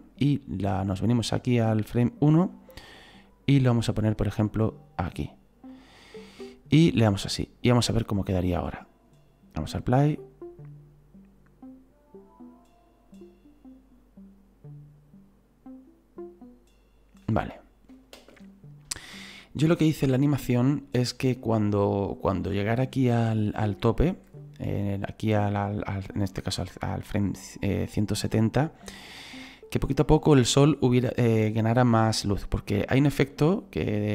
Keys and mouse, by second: 3.2 click, 4.5 click, 7.3 click, 8.4 click, 8.8 right click, 18.1 space, 24.9 right click.